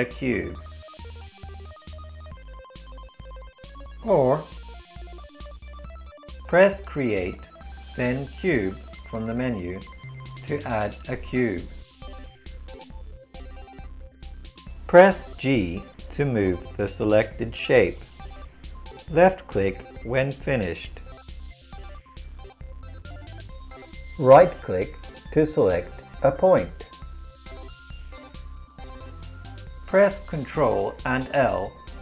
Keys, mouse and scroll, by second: 7.4-15.1 drag, 15.1 g, 29.9 ctrl+l.